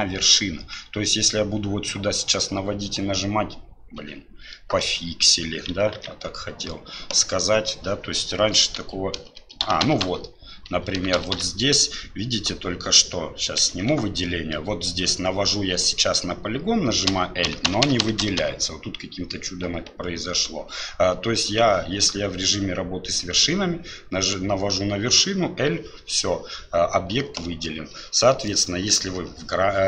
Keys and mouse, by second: 6.0 ctrl+z, 8.8-12.0 l, 13.7 alt+a, 28.6-29.8 drag.